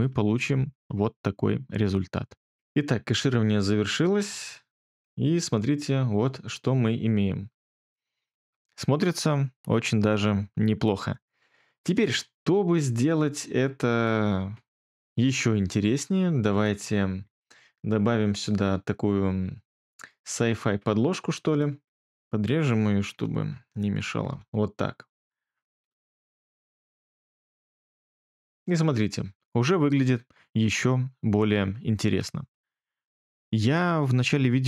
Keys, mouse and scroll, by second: 4.9 space, 8.3 space, 23.1 ctrl+b, 24.3 BackSpace, 27.4 space, 32.0 space.